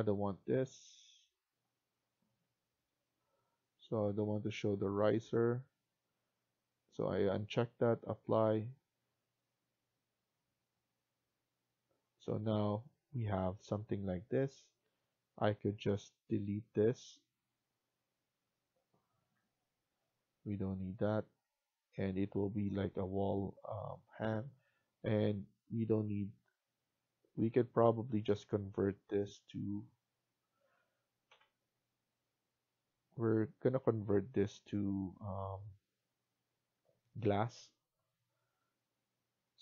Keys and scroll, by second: 19.1 Delete, 31.2 Delete.